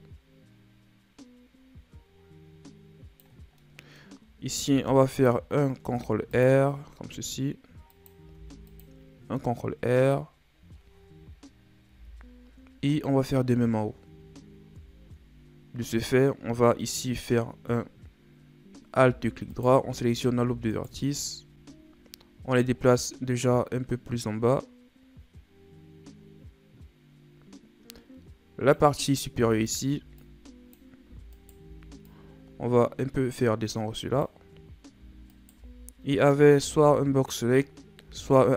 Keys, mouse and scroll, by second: 3.6-4.7 middle drag, 4.7 ctrl+r, 6.0 ctrl+r, 8.4 ctrl+r, 10.5 scroll down 3, 12.0 KP_1, 13.0 scroll up 7, 13.8-15.5 scroll up 6, 15.5 scroll up 2, 19.5 alt+right click, 20.7 alt+shift+right click, 23.0-26.0 drag, 29.6 alt+right click, 30.2-31.3 drag, 31.3 alt+right click, 32.1 click, 35.3 alt+shift+right click, 36.7 z, 38.0 z.